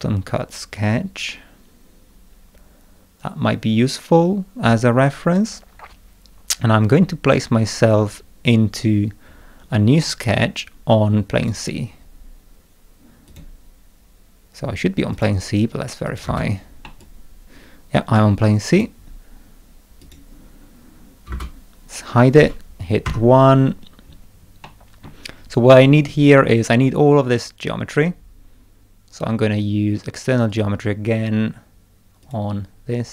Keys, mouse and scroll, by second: 7.0 scroll down 2, 9.2-9.8 scroll down 4, 10.0 middle click, 11.4 click, 13.3 click, 15.1 click, 16.0 click, 16.2 space, 16.8-18.7 middle drag, 17.0-18.8 drag, 20.0 click, 21.3 space, 23.0 1, 23.7-24.3 scroll up 2, 24.6 middle click, 25.7 middle click, 30.5 click, 32.2 click.